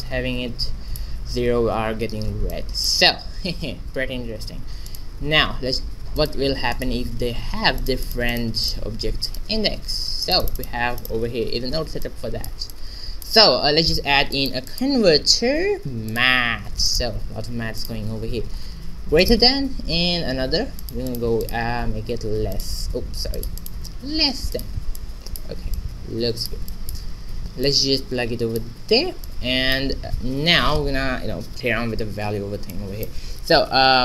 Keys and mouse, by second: 2.5-4.3 middle drag, 4.6 shift+z, 4.8-8.5 right drag, 6.1-8.4 drag, 9.2-11.0 drag, 9.2-10.8 right drag, 11.9 shift+z, 12.0-13.1 drag, 13.4 shift+a, 17.7-19.7 drag, 20.2 shift+d, 21.0-23.2 drag, 23.4-25.0 drag, 25.0 middle click, 25.1-27.4 drag, 27.4 shift+z, 28.4-31.1 drag, 32.7-34.0 drag.